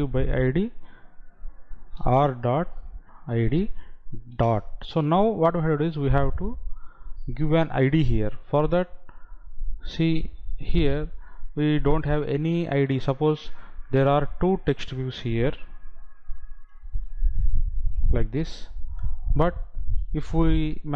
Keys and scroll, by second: 15.9 ctrl+c, 17.7 ctrl+v.